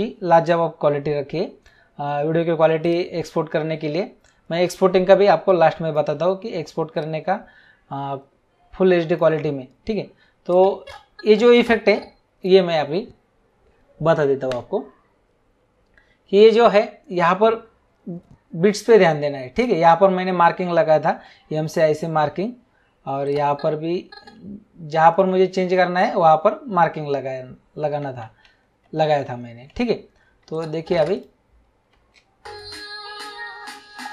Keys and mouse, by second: 2.8 click, 6.9 click, 10.5 click, 19.5 click, 21.6 m, 23.2 click, 25.6 m, 28.8 ctrl+z, 30.5 click, 31.9 space.